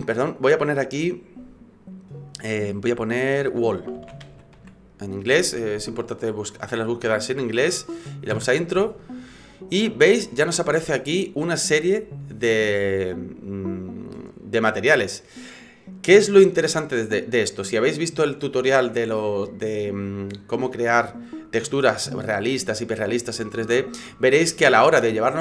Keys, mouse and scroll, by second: 1.0 click.